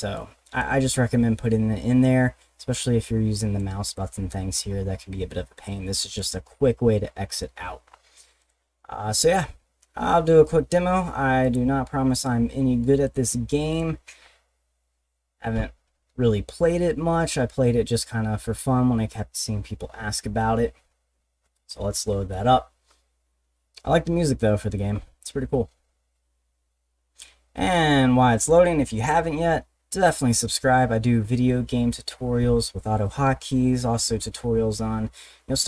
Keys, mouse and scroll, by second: 0.1 click, 3.0 click, 3.9 click, 6.0 click, 7.8 middle click, 7.9 scroll up 2, 8.4 click, 11.4 click, 13.0 click, 13.7 click.